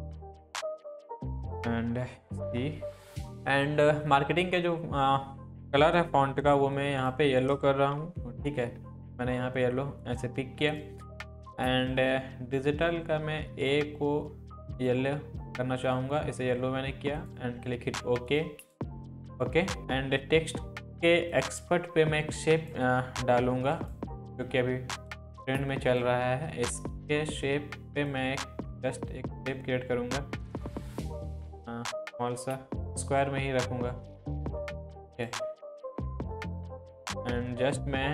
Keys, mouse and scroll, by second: 3.2 click, 4.0 click, 6.8-7.4 click, 7.9 ctrl+v, 10.0-13.8 drag, 21.3 click, 28.1-33.1 drag, 33.9-34.6 scroll down 1, 35.1 drag.